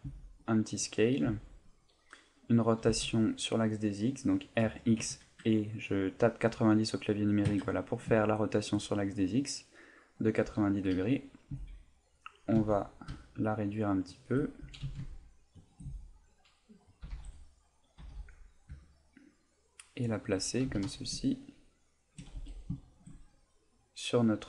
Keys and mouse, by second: 0.1 s, 1.0 click, 1.3 s, 1.8 click, 2.3 middle click, 2.8 r, 8.3 shift+middle click, 9.0 middle click, 11.5 s, 14.2 shift+click, 14.6 s, 15.6 shift+click, 15.9 s, 17.0 click, 17.0 g, 17.4 click, 18.0 g, 20.2 shift+click, 20.7 s, 22.1 shift+click, 22.3 g, 22.9 shift+click, 24.2 middle click.